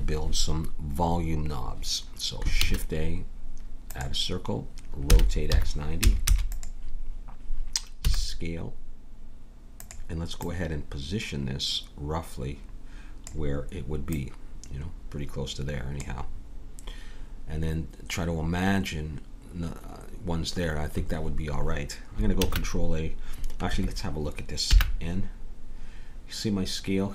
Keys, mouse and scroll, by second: 2.6 shift+a, 5.1 r, 8.0 s, 10.4-12.2 drag, 14.1-15.9 drag, 22.4 ctrl+a, 24.7 n.